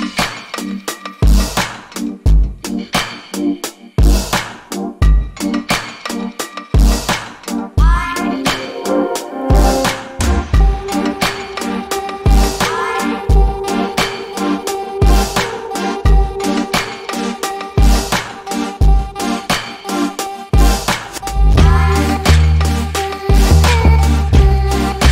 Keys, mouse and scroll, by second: 0.1 n, 0.2 a, 0.8 scroll down 1, 1.0 alt+click, 1.6 alt+middle click, 2.0 alt+click, 5.5 double click, 6.0 scroll up 1, 6.3 alt+click, 7.6-8.4 scroll up 1, 8.4 click, 8.7-9.9 scroll down 1, 9.9 alt+click, 11.1-12.1 scroll up 1, 12.1 click, 12.5-13.2 scroll up 1, 13.2 ctrl+z, 15.1-15.5 scroll up 1, 15.9 alt+click, 16.6 ctrl+z, 18.1 click, 18.5 double click, 19.5 click, 21.3 alt+middle click, 24.2 alt+click.